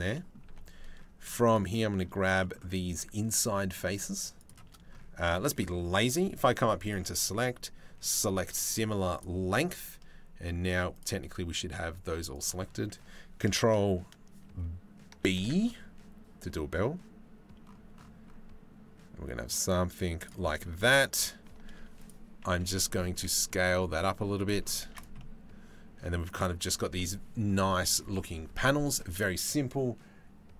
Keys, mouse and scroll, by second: 0.1 2, 1.1 click, 2.0 middle click, 4.0 shift+middle click, 4.9 middle click, 6.4-8.8 middle drag, 9.2 middle click, 10.3 z, 10.8 middle click, 11.7 z, 14.8 ctrl+b, 20.1 middle click, 20.8 2, 21.6 alt+click, 22.7 s, 24.5 Tab, 24.5-25.6 drag, 25.9 click, 28.8-30.5 drag.